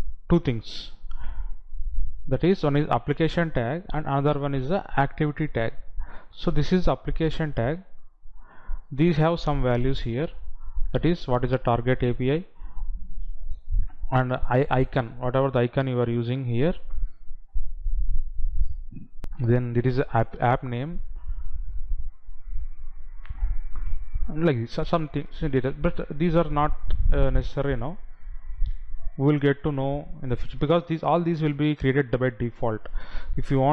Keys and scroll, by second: 19.3 F9.